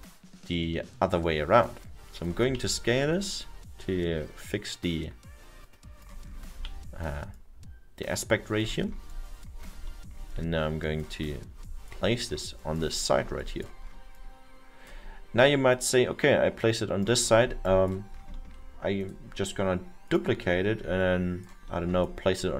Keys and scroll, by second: 2.5 e, 6.7 w.